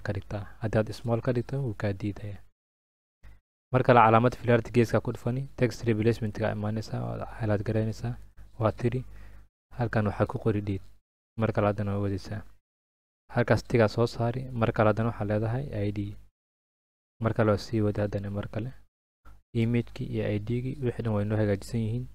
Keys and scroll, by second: 8.2-10.2 typing, 15.8-16.5 typing.